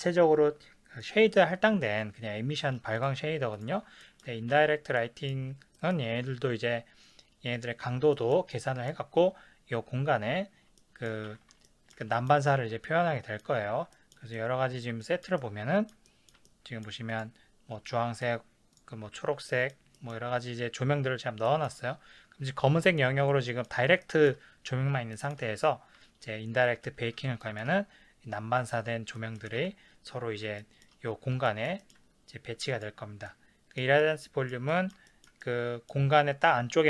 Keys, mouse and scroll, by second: 1.0 click, 3.0 click, 3.5 click, 4.0-8.3 ctrl+middle drag, 4.6 ctrl+s, 8.5 ctrl+scroll down 1, 11.3 ctrl+s, 11.7 ctrl+middle click, 12.8-17.1 middle drag, 17.1 click, 18.0 shift+middle click, 18.7 click, 19.5-23.1 shift+middle drag, 23.2-32.7 middle drag, 29.6 ctrl+s, 32.7 click, 33.3-36.8 middle drag.